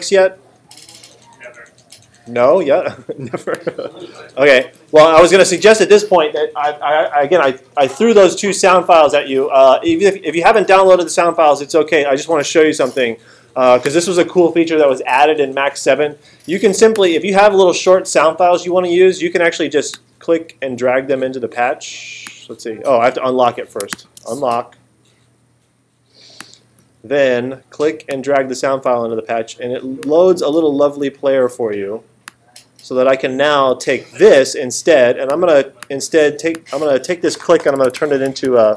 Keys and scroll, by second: 37.7-38.7 typing.